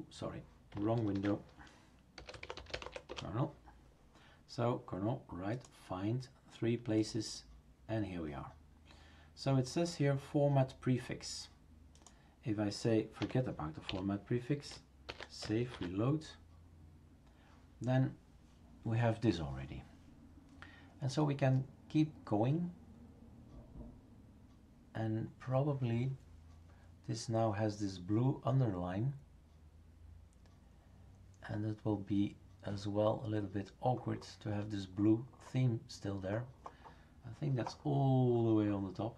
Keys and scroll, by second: 1.1 ctrl+f, 1.9-3.3 typing, 13.2 Left, 14.1 ;, 15.1 ctrl+s.